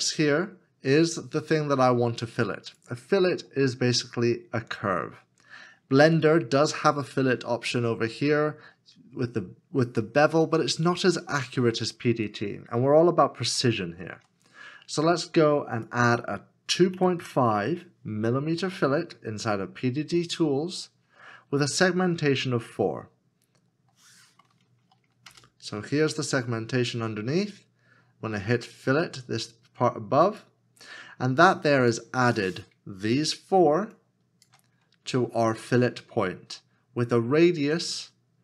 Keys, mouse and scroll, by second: 13.6 shift+middle click, 16.8 KP_2, 17.2 KP_5, 25.3 KP_5, 26.2 Return, 33.1 Return, 33.9 shift+click.